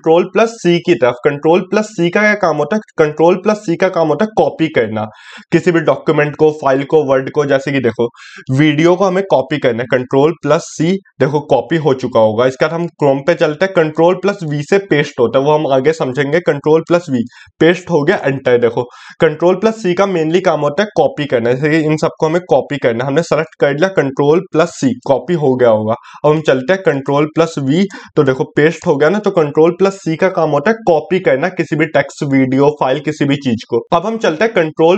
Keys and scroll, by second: 33.8 ctrl+d.